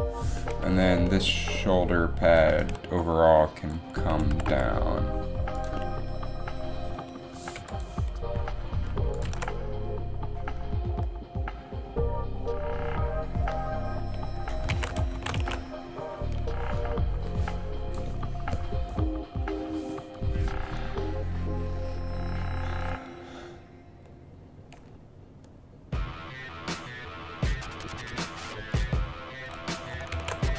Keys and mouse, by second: 4.2 r, 6.8 middle click, 8.0 i, 9.4 alt+a, 11.4 alt+a, 14.9 alt+a, 15.3 shift+Left, 15.5 alt+a, 30.4 alt+a.